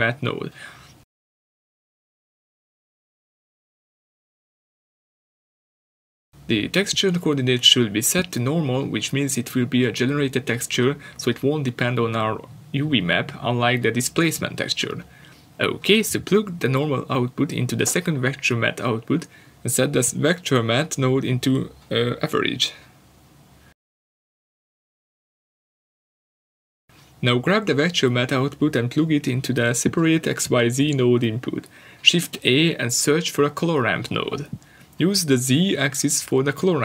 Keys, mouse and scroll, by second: 24.0 click.